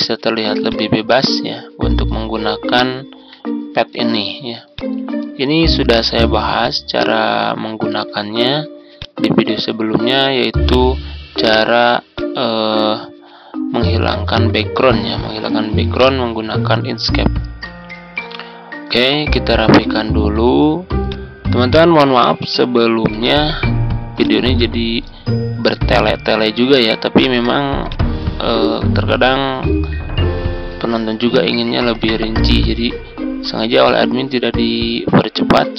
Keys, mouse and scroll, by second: 2.9 ctrl+scroll down 1, 4.6-10.6 drag, 11.0-12.1 ctrl+scroll up 1, 12.1-17.6 drag, 17.8-18.8 ctrl+scroll down 1, 18.8-22.5 drag, 22.7 ctrl+scroll up 1, 24.6 click, 25.2 ctrl+scroll down 1, 26.0-27.8 scroll up 1, 27.8-29.8 drag, 32.0-35.7 drag.